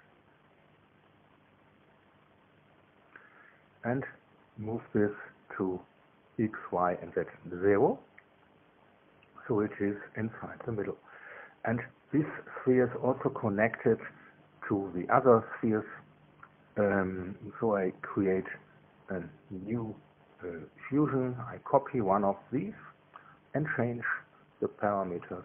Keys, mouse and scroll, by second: 1.7 ctrl+c, 2.5 ctrl+v, 4.0 click, 5.5 click, 6.8 KP_0, 7.1 Tab, 7.9 KP_0, 8.5 Tab, 9.0 KP_0, 9.8 KP_Enter, 11.2-13.0 drag, 16.8-25.4 drag.